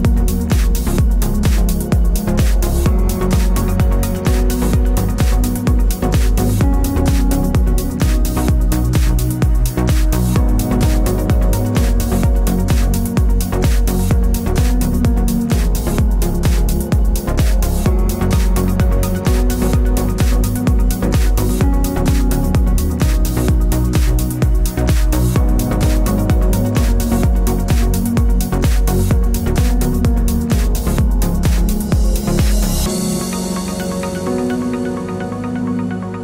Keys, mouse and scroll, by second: 0.9 click, 1.7 x, 2.3-3.0 middle drag, 3.0 click, 4.5 shift+click, 5.2-9.1 middle drag, 7.5 s, 9.3 click, 10.1 click, 10.3 click, 10.9 click, 11.2 click, 11.5 click, 12.3 x, 12.9-14.8 middle drag, 14.2 scroll down 1, 14.3 scroll up 1, 14.8 click, 16.0 click, 16.4 click, 16.6 click, 17.7 click, 18.8 a, 19.4-23.2 right drag, 20.6 g, 23.5 click, 24.0 shift+click, 24.3 shift+click, 24.4 shift+click, 24.6 shift+click, 24.8 shift+click, 25.0 z, 25.6-28.6 middle drag, 27.6 a, 28.6 click, 28.9-32.6 middle drag, 30.1 g, 32.6 Tab, 32.8-34.7 middle drag, 33.8 z, 34.7 click, 35.1-36.2 middle drag.